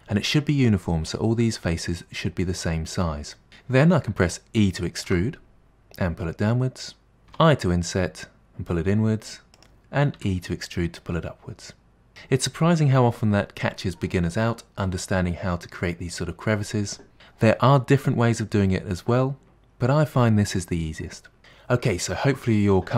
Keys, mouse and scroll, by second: 5.1 e, 7.3 i, 10.2 e.